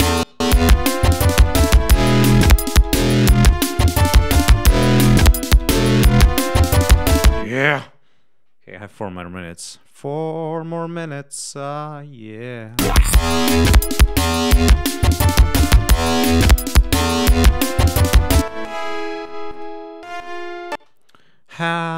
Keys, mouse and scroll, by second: 1.9 right click, 4.4-4.7 scroll down 2, 5.4-5.8 scroll down 2, 10.9 click, 12.5 click, 13.4 click, 14.3-15.9 drag, 16.2 click, 18.3 click, 19.4 click, 20.6 space, 21.0 click.